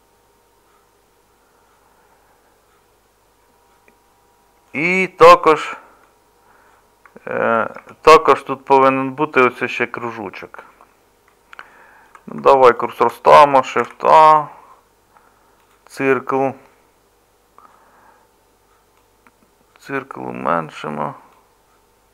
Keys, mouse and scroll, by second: 5.5 Tab, 7.8 Tab, 13.8 shift+a.